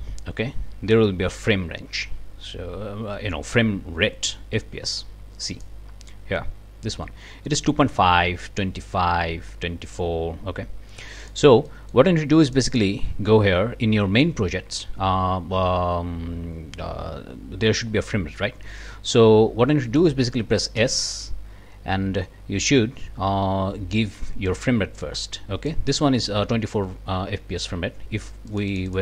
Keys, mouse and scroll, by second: 5.5 click, 11.2 click, 11.7-12.1 scroll up 1, 12.4 click, 18.8-19.3 scroll up 1, 19.9 click, 20.8 s, 24.5 click, 25.0-25.9 drag, 28.5 click.